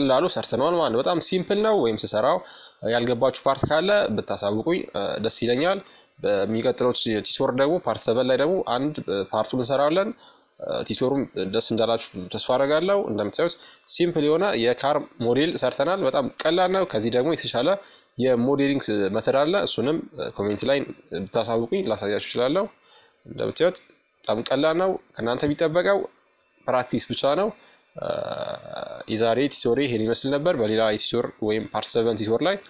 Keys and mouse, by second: 9.6-15.9 middle drag, 16.1-19.1 middle drag, 19.4-23.6 middle drag, 25.1-32.3 middle drag, 32.5 middle click.